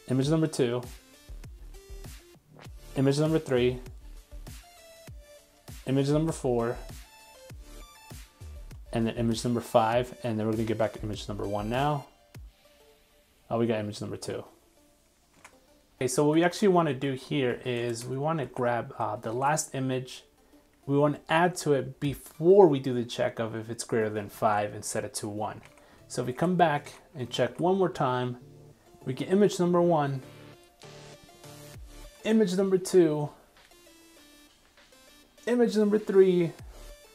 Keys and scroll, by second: 15.3 super+Tab, 18.4 super+v, 19.3 super+s, 24.4 super+s, 25.8 super+Tab, 26.4 super+Tab, 27.4 super+r.